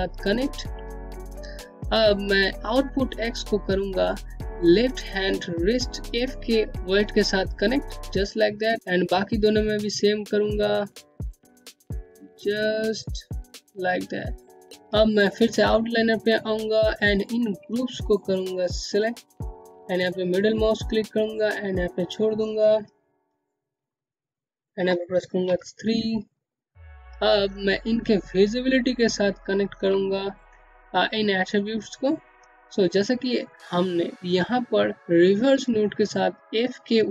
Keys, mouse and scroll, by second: 1.2 click, 6.7 scroll down 1, 6.8 scroll up 1, 7.0 alt+middle click, 7.1-9.3 typing, 8.8 click, 12.3-12.7 scroll down 1, 12.8 alt+middle click, 13.2 Home, 14.5 scroll down 1, 15.2 click, 16.0 ctrl+click, 17.9 click, 19.6 click, 23.1 middle click, 24.7 3, 25.6 click, 26.6 scroll up 1, 28.3 scroll down 1, 28.7 middle click, 29.3 scroll down 1, 30.8 scroll up 1, 32.5-32.9 scroll down 1.